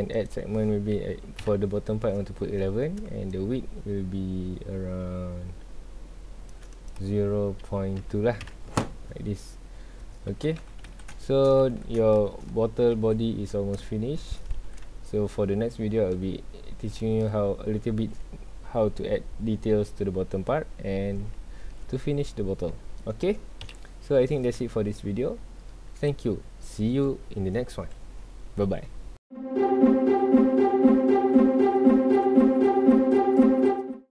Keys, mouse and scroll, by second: 0.1 click, 1.1 KP_1, 1.4 KP_Enter, 3.3-6.4 shift+drag, 6.7-8.5 drag, 8.5 KP_Enter, 10.1 scroll down 1, 10.3 alt+a, 11.2-11.6 shift+middle drag, 11.6 ctrl+s, 12.1-12.4 shift+middle drag, 12.4-12.9 scroll up 2, 12.9 ctrl+s, 13.3-13.9 scroll down 2, 13.9-14.6 shift+middle drag, 14.6 ctrl+s, 14.8-17.4 shift+middle drag, 17.4-20.5 scroll up 2, 20.6 scroll down 2, 20.8-22.6 middle drag, 22.6 scroll down 2, 22.8-23.6 shift+middle drag, 23.6 KP_1, 24.7-34.1 shift+middle drag.